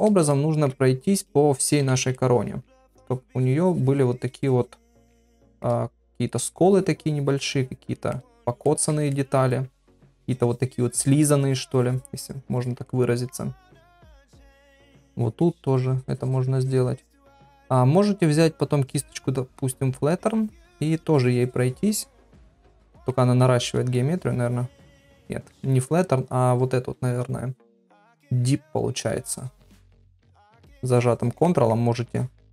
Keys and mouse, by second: 0.3 ctrl+middle click, 1.8-2.1 [, 2.1 middle click, 2.9-4.1 drag, 5.3 shift+middle click, 6.3-7.9 drag, 8.1 middle click, 8.7 ctrl+middle click, 9.1 shift+middle click, 10.0-12.8 drag, 12.9 middle click, 13.7 middle click, 14.4-16.5 drag, 16.6 click, 17.1 middle click, 20.2 click, 21.1-22.6 drag, 22.8 middle click, 23.3 ctrl+z, 24.0-25.1 ctrl+drag, 25.3 ctrl+middle click, 25.6 ctrl+z, 26.5 click, 29.1 click, 30.2 ctrl+z, 30.5 ctrl+click, 31.5 middle click, 32.1 ctrl+click.